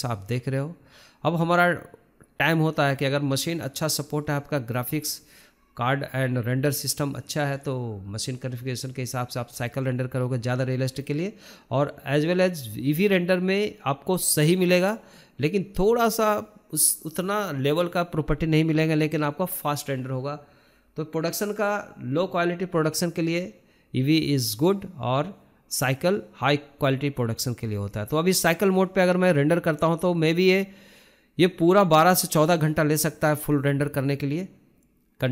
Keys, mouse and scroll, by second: 7.3-9.2 drag, 12.1-15.1 drag, 15.8-17.2 drag, 19.5 scroll down 4, 19.7 scroll up 2, 20.2-20.6 drag, 20.6-21.4 scroll up 11, 22.0 click, 23.7-24.6 scroll down 3, 24.6-25.0 scroll down 2, 25.0-25.7 scroll up 6, 26.6 shift+middle click, 27.2-27.7 scroll down 11, 27.8 shift+middle click, 28.1-28.5 scroll up 5, 28.5-29.7 shift+middle drag, 29.7-31.5 drag, 31.5 shift+middle click, 31.5 scroll up 2, 31.7-35.3 shift+middle drag.